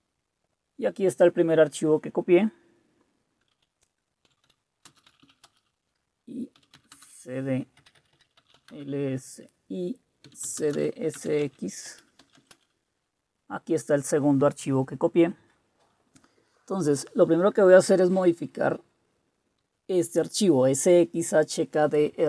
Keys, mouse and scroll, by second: 4.2-5.2 typing, 5.5 Return, 6.3-8.7 typing, 10.0-12.7 typing.